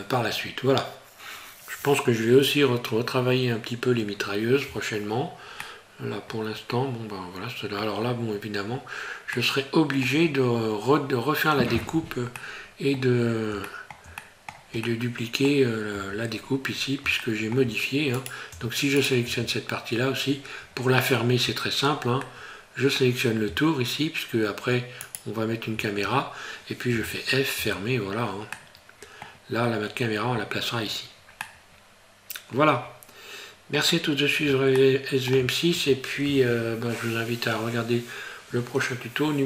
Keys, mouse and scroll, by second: 5.6 middle click, 9.4 middle click, 13.7 shift+middle click, 14.2 middle click, 14.8 middle click, 16.0 Tab, 16.4-17.0 scroll up 3, 17.2 shift+middle click, 18.1 right click, 18.5 Tab, 19.0 right click, 19.3 Tab, 20.3 scroll up 2, 22.3 middle click, 25.1 alt+right click, 26.9 f, 27.6 Tab, 27.9-28.2 scroll down 4, 28.6 middle click, 30.9 scroll down 2, 31.0 scroll up 1, 31.4 middle click, 34.8 shift+middle click.